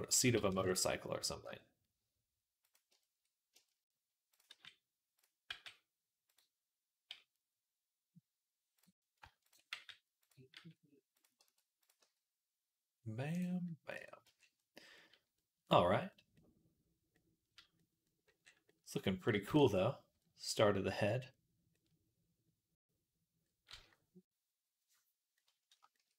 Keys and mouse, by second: 0.0 s, 1.3 r, 5.4 g, 9.5 g, 10.4 r, 11.3 g, 11.8 r, 13.8 Tab, 14.1 z, 14.8-16.5 drag, 16.5 click, 17.0 click, 17.7-20.3 right drag, 19.5 ctrl+s, 20.4-25.6 right drag.